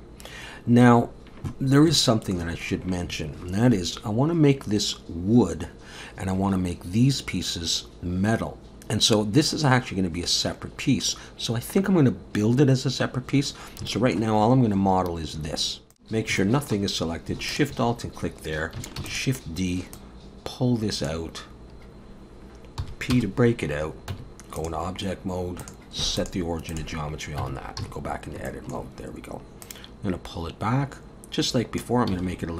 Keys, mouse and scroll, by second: 1.1-1.9 scroll down 1, 2.0 shift+middle click, 13.5 scroll up 2, 13.9 shift+middle click, 14.4-15.6 scroll up 1, 15.7 scroll up 4, 16.2 scroll up 1, 16.4 shift+middle click, 17.5 alt+shift+click, 17.9 scroll down 2, 19.0 shift+d, 20.0 click, 22.8 p, 23.6-24.1 scroll up 3, 24.1 Tab, 24.6 click, 25.6 click, 27.4 Tab, 27.8 a, 28.1 scroll up 2, 28.5 shift+middle click, 29.6 click, 32.1 s.